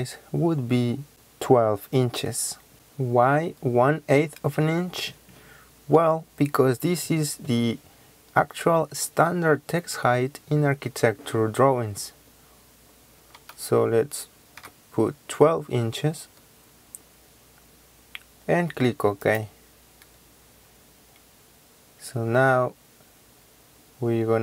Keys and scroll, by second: 13.3 KP_1, 14.6 KP_2.